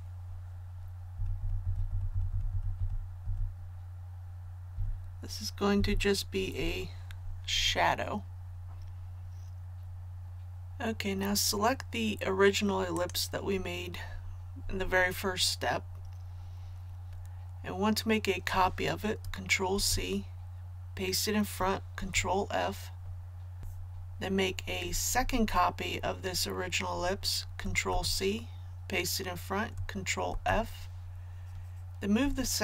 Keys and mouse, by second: 1.1 Up, 1.3 Up, 1.8 Up, 2.1 Up, 2.2 Up, 2.4 Up, 2.7 Up, 3.2 Up, 4.7 Up, 5.7 Down, 10.2 click, 19.7 ctrl+c, 22.0 ctrl+f, 25.5 ctrl+f, 27.9 ctrl+c, 30.3 ctrl+f.